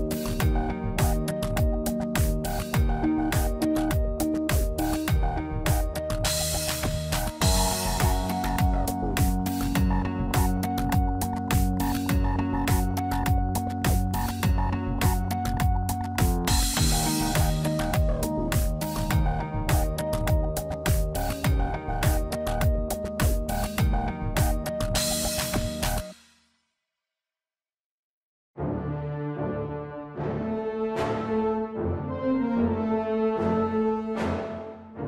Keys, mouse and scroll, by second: 1.8 Tab, 3.1 click, 3.6 middle click, 4.2 scroll down 1, 5.0 middle click, 5.0 scroll down 3, 7.7-8.1 scroll up 4, 8.1 shift+middle click, 11.7 click, 12.1 Tab, 12.7 click, 14.4 shift+s, 15.2 Tab, 16.0 shift+a, 19.1 s, 20.9 s, 22.2 click, 23.4 middle click, 24.3 s, 28.1 middle click, 30.2 middle click, 32.1 middle click, 32.5-32.8 scroll up 2, 32.7 Tab, 33.0 middle click, 33.6 Tab, 34.2 ctrl+a.